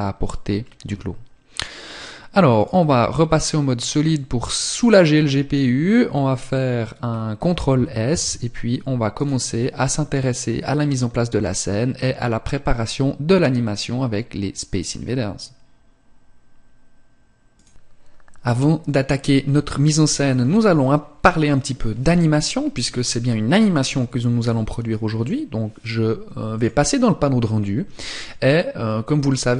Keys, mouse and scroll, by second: 2.9 click, 6.6-7.6 scroll down 2, 7.6 ctrl+s, 26.0 click, 27.7 click.